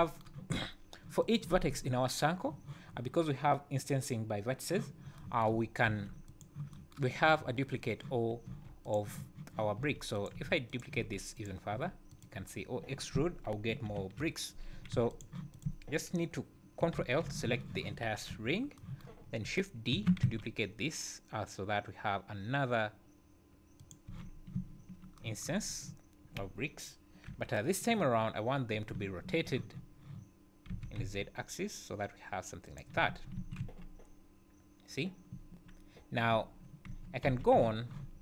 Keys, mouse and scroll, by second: 1.2 click, 5.9 shift+d, 8.5 e, 9.8 e, 10.4 e, 11.0 e, 11.7 e, 12.5 scroll down 2, 13.9 ctrl+l, 14.9 x, 15.5 click, 17.0 ctrl+l, 18.3 KP_1, 19.2 scroll up 3, 19.9 shift+d, 24.1 z, 24.5 `, 25.6 scroll down 2, 27.2 KP_7, 28.9 `, 30.7 r, 32.9 a, 33.3 `, 33.6 Tab, 35.3 `, 36.3 `, 36.9 Tab, 37.2 a, 37.5 z.